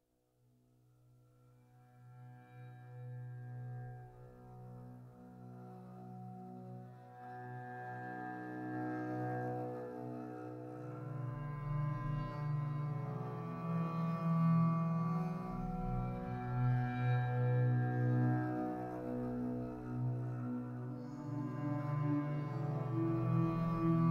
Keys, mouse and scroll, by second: 0.4 scroll up 3, 0.7 middle click, 1.0 z, 3.3 click, 4.1 click, 4.4-5.0 middle drag, 5.0-7.1 scroll up 2, 7.1-7.6 middle drag, 7.6 click, 7.9 Tab, 8.2 middle click, 8.5 3, 8.7 click, 9.1 e, 10.2 ctrl+z, 10.8 ctrl+z, 11.2 shift+click, 11.6 click, 12.0 shift+click, 12.4 e, 13.3 click, 13.9 click, 14.1 e, 15.6 middle click, 15.9 2, 16.1 click, 17.2 shift+click, 17.7 ctrl+b, 18.8 Tab, 19.0 scroll down 5, 19.2-20.3 middle drag, 20.3-21.1 scroll up 6, 21.1 click, 21.3 Tab, 21.5 click, 22.2 shift+click, 23.1 ctrl+z, 23.3 shift+click, 23.8 ctrl+b.